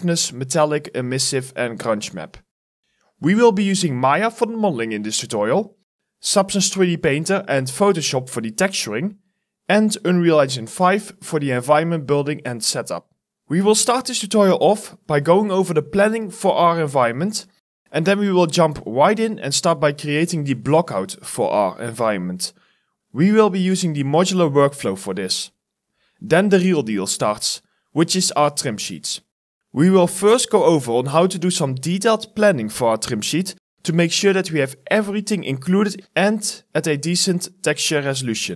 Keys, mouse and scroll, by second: 0.0-3.1 typing, 13.4 scroll down 1, 13.7 right click, 14.0 d, 15.6 right click, 16.0 w, 17.1 right click, 20.7 right click, 22.7-24.2 typing, 25.7 right click, 25.7 s, 29.0 alt+scroll up 1, 32.3 alt+scroll down 1, 33.4 alt+scroll up 1, 35.3 alt+scroll down 1, 35.4-36.1 scroll up 3, 36.2 scroll down 1.